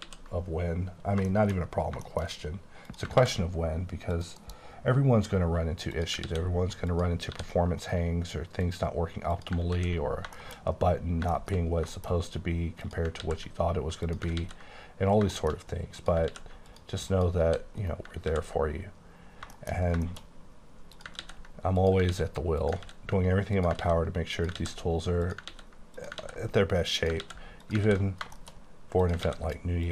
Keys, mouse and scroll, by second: 0.1 ctrl+x, 1.4 shift+middle click, 1.7 scroll down 3, 2.1 shift+middle click, 2.4-2.8 scroll up 2, 2.8 click, 3.2 ctrl+x, 3.5-4.1 scroll up 2, 4.1 click, 4.4 KP_Decimal, 4.8 scroll down 1, 5.0 scroll up 4, 5.4 scroll down 2, 5.9 click, 6.3 ctrl+x, 7.1 click, 7.3 g, 7.9 right click, 8.7 click, 9.4 click, 9.8 ctrl+x, 10.1-11.1 scroll down 12, 10.4 shift+middle click, 11.4 shift+middle click, 11.6-12.8 shift+scroll up 8, 12.0 shift+middle click, 12.8 click, 13.2 ctrl+x, 14.0 click, 14.4 ctrl+x, 15.1 scroll down 2, 15.4 middle click, 15.7 scroll up 1, 15.9 click, 16.3 ctrl+x, 16.7 click, 17.1 click, 17.5 g, 17.8 right click, 18.2 ctrl+x, 19.3-20.0 scroll down 8, 19.6 shift+middle click, 20.1 shift+middle click, 20.3-20.9 shift+scroll up 4, 20.9 click, 21.2 ctrl+x, 21.8 click, 22.1 ctrl+x, 22.7 click, 22.9 ctrl+x, 23.6 click, 23.8 ctrl+x, 24.4 click, 24.6 ctrl+x, 25.2 click, 25.5 ctrl+x, 25.9 click, 26.2 ctrl+x, 26.9 click, 27.3 ctrl+x, 27.6 click, 27.9 ctrl+x, 28.1 scroll down 5, 28.4 shift+middle click, 28.6-29.0 scroll up 4, 29.0 click, 29.3 ctrl+x, 29.8 click.